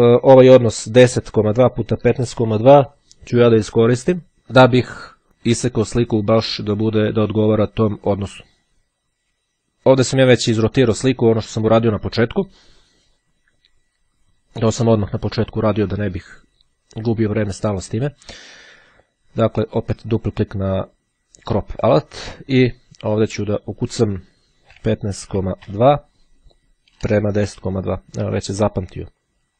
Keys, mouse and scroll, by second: 20.3 click, 22.8 click, 23.8 KP_1, 24.0 KP_5, 25.4 KP_Decimal, 29.0 click.